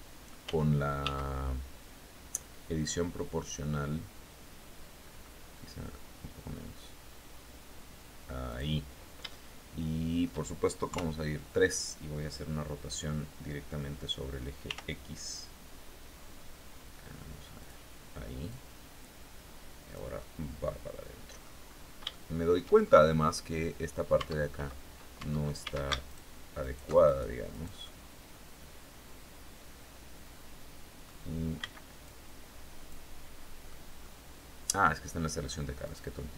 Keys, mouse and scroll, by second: 4.5-4.9 scroll up 1, 7.9 click, 8.7-9.9 shift+middle drag, 10.3 KP_3, 14.1 r, 17.0 click, 17.9-19.6 drag, 19.6 click, 20.0 scroll up 2, 21.1-21.5 scroll up 2, 21.6 shift+click, 22.3 shift+scroll up 2, 23.6 Tab, 24.6 Tab, 25.1 a, 25.5 alt+shift+right click, 26.0 alt+shift+right click, 26.5 alt+shift+right click, 27.3-30.7 alt+shift+drag, 27.3-30.7 alt+shift+right drag, 31.0 b, 31.5-32.5 drag, 33.1 middle click, 35.3 click.